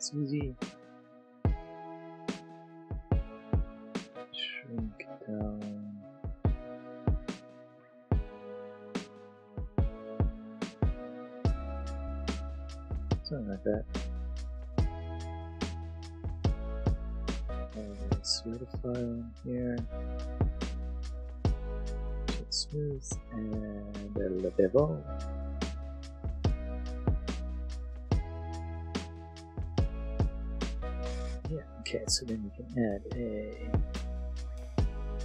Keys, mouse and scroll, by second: 0.6 click, 1.9 s, 2.2 middle click, 6.6-8.6 middle drag, 11.6 middle click, 12.5 middle click, 12.9 click, 13.7 Tab, 13.7 middle click, 14.0 middle click, 14.7 click, 18.0 click, 21.4 right click, 21.8 click, 23.9 click, 26.5 click, 27.3 shift+middle click, 27.6 click, 27.6 middle click, 27.7 click, 28.3 click, 28.6 Tab, 28.8 a, 28.9 space, 29.2 click, 29.2 m, 29.4 click, 29.7 Tab, 29.7 middle click, 33.0 click.